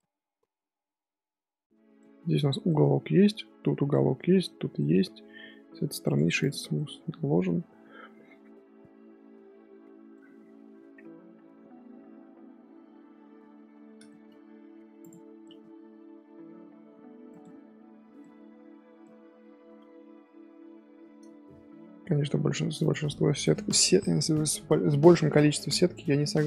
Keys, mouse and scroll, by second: 4.6 scroll down 1, 4.7-6.0 middle drag, 6.0-6.7 right drag, 6.7-9.7 middle drag, 14.0 shift+middle drag, 14.3 scroll up 1, 14.3 scroll down 1, 14.6 scroll up 1, 15.0 click, 15.4-15.9 middle drag, 15.9 g, 18.2 middle click, 18.8 Tab, 19.0-20.2 middle drag, 20.2-21.0 scroll down 2, 21.0-22.7 middle drag, 22.7 click, 23.4 click, 25.6-26.4 middle drag.